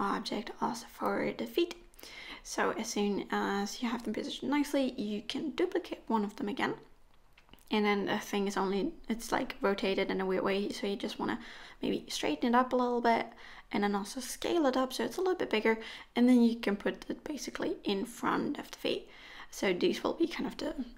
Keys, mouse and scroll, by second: 0.0 middle click, 0.3 click, 0.9 g, 1.2 click, 1.2 g, 1.6 click, 1.7 g, 2.1 click, 3.3-4.9 scroll down 7, 3.8 click, 4.9 KP_1, 5.9 shift+d, 7.2 middle click, 8.6 KP_3, 9.4 r, 11.0-11.3 scroll up 1, 11.3 scroll down 1, 11.5 scroll down 3, 11.7 shift+middle click, 12.4 s, 14.4 g, 16.5 KP_1, 16.9 scroll up 4, 17.2 shift+middle click, 17.9-18.5 scroll up 1, 18.5-19.2 scroll up 1, 18.5 g, 19.8 KP_1, 20.1 KP_3, 20.6-20.9 scroll up 2.